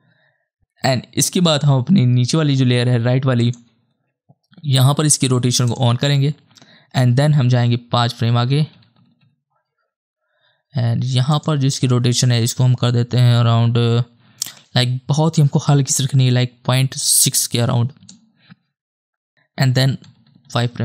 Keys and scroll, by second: 8.2 ctrl+Right, 8.7 Right, 9.0 Right, 9.2 Right, 17.1 KP_6, 18.0 Return, 20.0 ctrl+Right, 20.3 ctrl+Right, 20.4 ctrl+Right, 20.6 ctrl+Right.